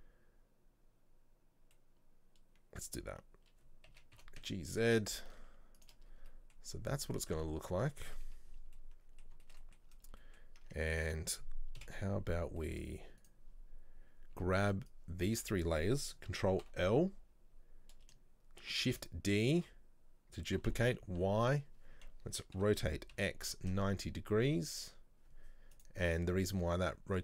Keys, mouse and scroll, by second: 1.8-4.0 middle drag, 4.0 a, 6.2-6.9 scroll down 2, 7.2 middle click, 7.5 Tab, 7.7 scroll up 1, 8.6 scroll down 1, 8.9-10.0 middle drag, 10.0-10.3 scroll up 2, 10.3-10.7 middle drag, 10.7 Tab, 11.9 KP_7, 12.7 shift+middle click, 13.3 right click, 14.1 scroll down 1, 14.4 b, 16.7 ctrl+l, 19.0 shift+d.